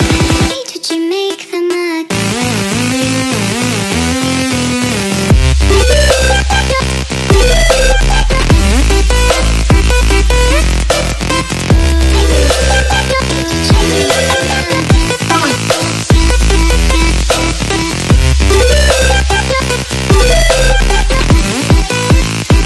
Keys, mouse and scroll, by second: 0.4 click, 1.8 click, 2.9 click, 3.3 click, 6.0 click, 7.3 ctrl+h, 7.5 ctrl+space, 7.8 click, 8.0 click, 8.7 click, 8.9 Tab, 9.5 ctrl+click, 10.1 ctrl+click, 10.4 ctrl+click, 11.0 click, 11.2 Tab, 11.8 click, 12.9 click, 13.0 click, 14.8 click, 16.0 click, 17.0 click.